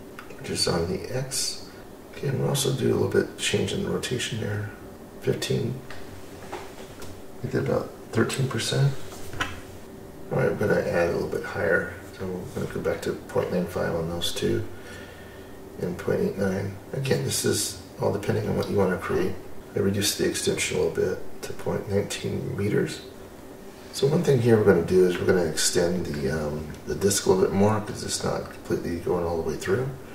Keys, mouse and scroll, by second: 0.2 scroll up 2, 0.5-1.8 scroll down 2, 1.8-2.3 scroll up 1, 2.3-4.7 drag, 4.9-5.4 scroll up 2, 5.4 middle click, 5.8-6.5 scroll down 3, 6.5 middle click, 7.3-7.7 scroll up 2, 7.7 middle click, 8.5-8.8 scroll up 1, 8.8-9.8 scroll down 1, 9.8 click, 11.1-15.1 drag, 15.2-16.2 scroll down 5, 16.2-17.8 middle drag, 19.6-23.1 middle drag, 19.6 click, 23.9-26.1 middle drag, 26.3-26.8 scroll up 1, 26.8 scroll down 2, 29.7 click.